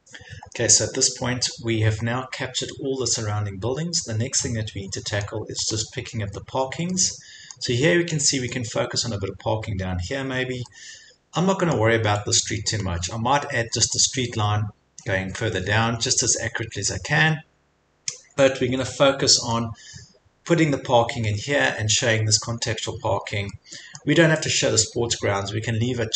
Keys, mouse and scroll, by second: 1.5 click, 1.6 click, 1.8 scroll, 3.4 scroll, 5.3 middle click, 5.7 scroll up 5, 7.6 scroll up 1, 7.6 click, 9.5-10.1 scroll up 3, 10.1 scroll, 11.9 click, 12.8 click, 12.9 scroll, 13.9 scroll, 17.4 scroll, 19.5 scroll, 20.1 middle click, 20.2 middle click, 21.3 middle click, 21.4 middle click, 21.7-22.2 scroll, 23.9 middle click.